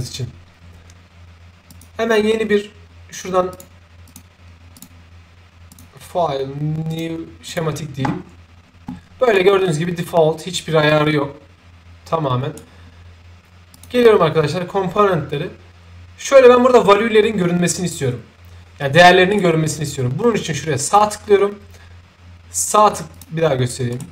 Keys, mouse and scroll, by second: 1.7 click, 3.5 click, 4.0 click, 4.7 click, 5.7 click, 6.9 click, 7.5 click, 9.3-12.5 right drag, 13.7 click, 19.3 right click, 20.8 click, 23.1 click, 23.9 right click.